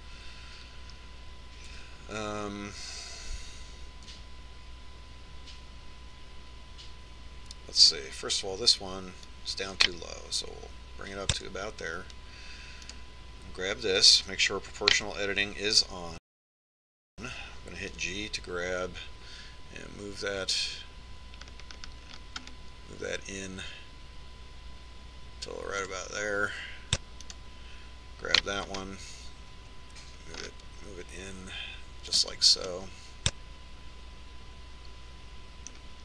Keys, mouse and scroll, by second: 3.6 a, 5.5 a, 6.0 a, 9.7 right click, 11.2-12.9 drag, 14.8 right click, 18.9 g, 28.3 right click, 29.4 g, 33.7-35.7 middle drag.